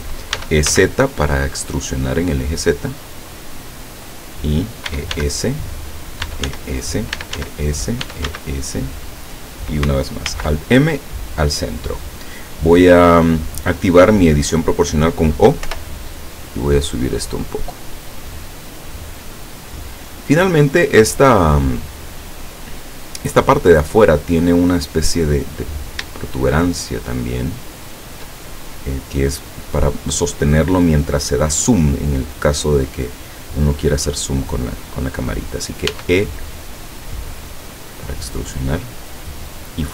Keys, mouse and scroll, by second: 0.4 e, 0.8 z, 4.1 click, 4.9 e, 5.2 s, 6.0 click, 6.3-8.4 typing, 7.0 click, 7.9 click, 9.0 click, 10.3 alt+m, 11.0 click, 15.7 o, 16.7-19.7 drag, 25.7 right click, 26.4 shift+right click, 27.2 shift+right click, 27.8 shift+right click, 35.9 e, 39.6 click.